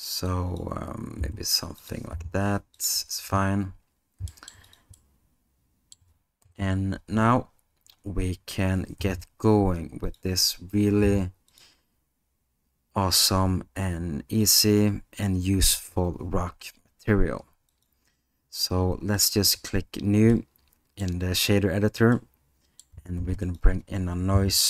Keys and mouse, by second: 1.2 s, 2.1 g, 4.3 middle drag, 5.0-5.9 alt+middle drag, 9.0 g, 11.0 g, 14.5 click, 17.7 click, 19.3 middle click, 20.4 middle click, 22.3 middle click.